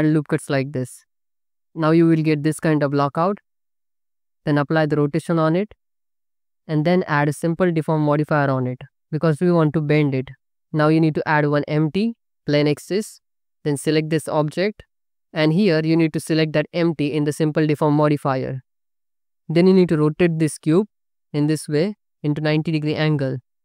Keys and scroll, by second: 3.4 Tab, 4.5 ctrl+a, 11.1 shift+a, 19.9 r.